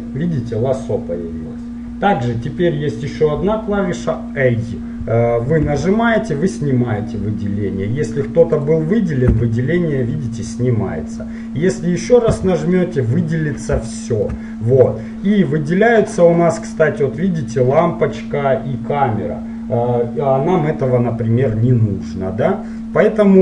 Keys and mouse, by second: 5.8 a, 8.6-12.4 right drag, 9.5 a, 12.4 a, 13.3-16.9 middle drag, 21.8-23.4 middle drag.